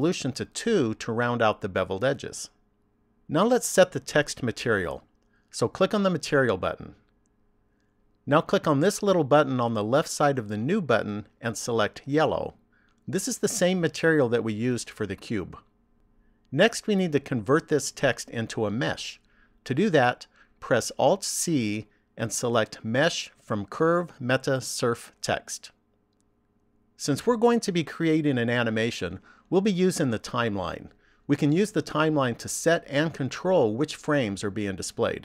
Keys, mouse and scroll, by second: 1.0 click, 1.7 click, 8.0 click, 10.7 click, 21.6 alt+c.